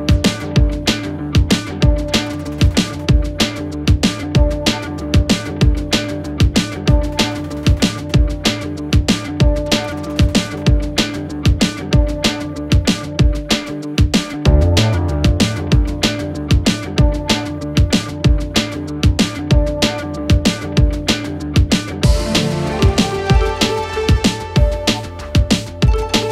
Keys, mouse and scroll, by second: 0.4 click, 1.7 g, 4.6 click, 4.9 scroll down 2, 5.1-5.5 scroll up 3, 5.5 click, 6.0 Tab, 6.1-6.7 scroll down 2, 6.8-7.3 scroll up 1, 7.3 click, 7.6 scroll down 2, 7.9-8.3 scroll up 1, 8.3 Tab, 9.2 x, 9.9 click, 10.6 alt+click, 10.7 alt+click, 11.1-11.8 scroll up 1, 11.8 g, 13.3 alt+click, 13.4 alt+click, 13.8 g, 14.7 click, 14.9-15.6 scroll down 3, 15.8 click, 16.3-17.1 scroll up 4, 17.1 alt+click, 17.7 g, 18.7 click, 19.0 alt+click, 19.5 g, 20.7 click, 21.0 alt+click, 21.1 alt+click, 21.5 g, 22.8 click, 23.4 alt+click, 23.5 alt+click, 24.0 g, 24.9 click, 25.1-26.0 scroll down 8, 26.0 Tab, 26.2-26.3 scroll up 12.